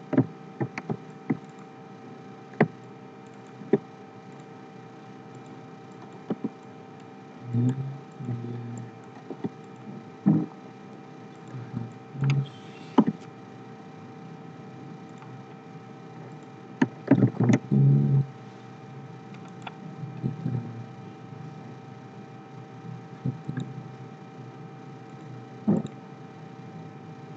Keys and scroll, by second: 17.1 ctrl+c, 17.3 ctrl+f.